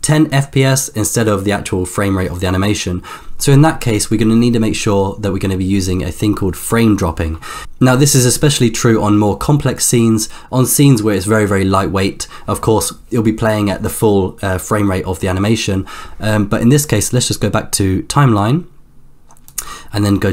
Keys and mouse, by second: 19.6 click.